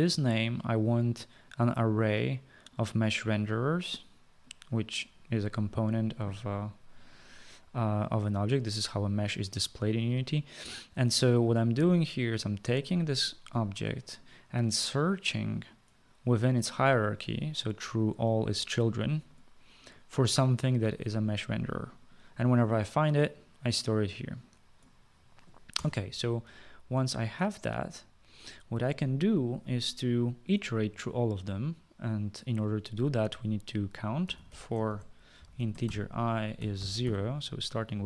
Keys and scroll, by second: 25.8 Return, 25.9 Return, 34.1-37.6 typing.